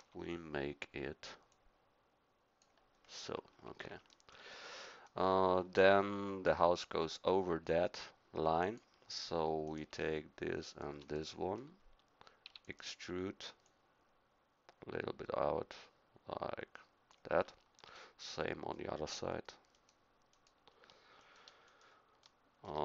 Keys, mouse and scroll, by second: 0.0 KP_3, 8.6-11.3 drag, 12.4 e, 17.9-22.8 middle drag.